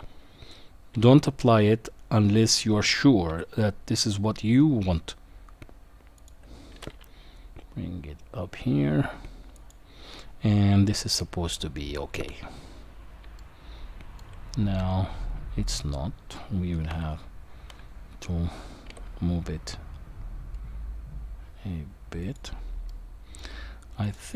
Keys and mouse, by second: 0.9 g, 6.7 g, 11.6-12.2 middle drag, 13.4-14.2 shift+middle drag, 14.8-15.7 middle drag, 16.9 KP_1, 18.9 g, 22.9-23.4 middle drag, 24.0 click.